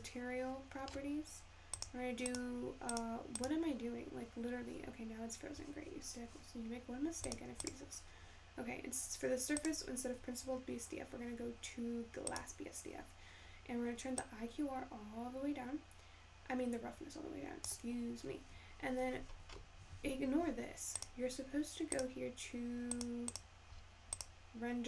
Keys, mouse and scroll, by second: 2.9 click, 8.9-22.8 drag.